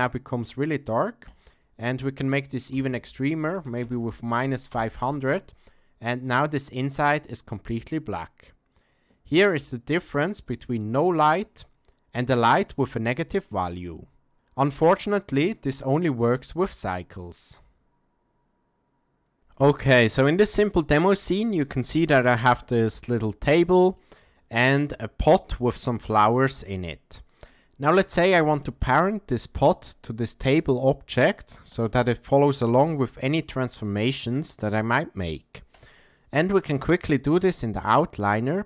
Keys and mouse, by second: 1.3-5.3 drag, 3.8 KP_0, 6.8-7.7 middle drag, 10.4 click, 12.5 click, 16.9-17.5 middle drag, 20.0-20.4 ctrl+drag, 20.4 ctrl+middle drag, 20.7-21.1 shift+middle drag, 21.5 click, 22.7 g, 24.3-24.8 shift+middle drag, 25.2 click, 26.1 g, 28.2 ctrl+middle click, 28.8-29.4 shift+middle drag, 32.6 g.